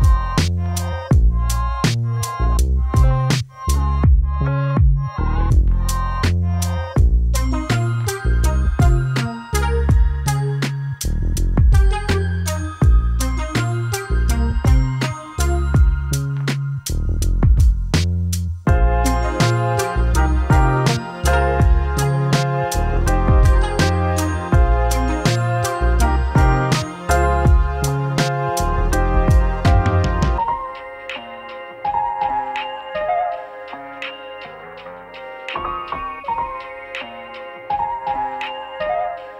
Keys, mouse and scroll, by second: 8.3 click, 10.8-11.8 typing, 11.8-21.8 drag, 26.3-33.6 drag, 33.6 ctrl+s, 34.9 click, 37.7 right click.